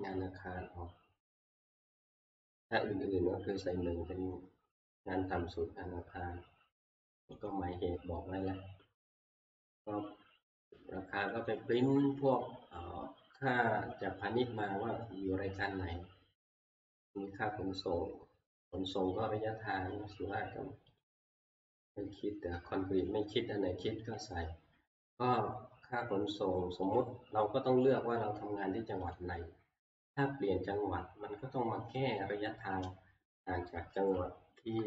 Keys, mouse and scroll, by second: 7.5 click, 11.5 click, 18.7 click, 21.0 click, 24.2 click, 27.0 click, 29.2 click, 34.7 ctrl+Home, 34.7 click.